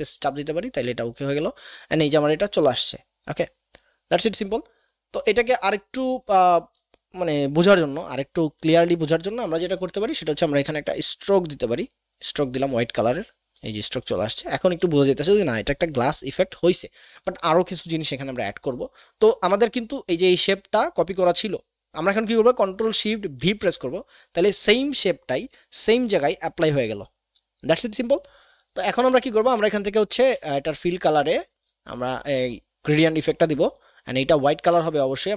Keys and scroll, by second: 23.4 ctrl+shift+v, 30.5 x.